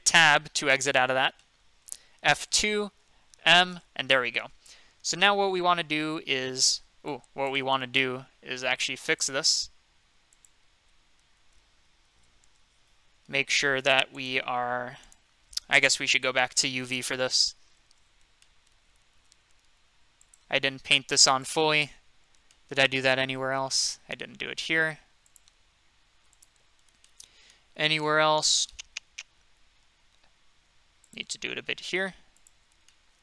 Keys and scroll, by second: 0.0 Tab, 2.2 F2, 3.4 m, 11.2 ctrl+z, 12.1 ctrl+z, 16.2 F3, 17.4 c.